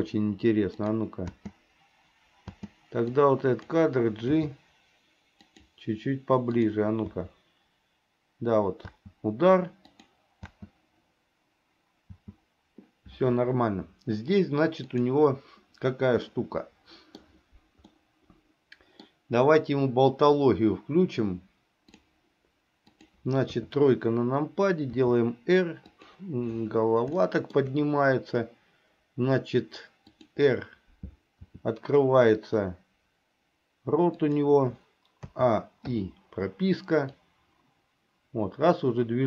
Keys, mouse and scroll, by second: 0.9 click, 1.4 space, 2.6 space, 3.4 click, 4.5 g, 6.7 click, 7.2 space, 8.9 space, 10.1 click, 12.2 space, 15.0 click, 16.4 middle click, 18.0-19.2 middle drag, 22.0 click, 23.0 click, 23.6 KP_3, 25.1 r, 27.3 middle click, 30.2 click, 31.5 r, 35.4 a, 36.0 i, 37.3-39.2 drag.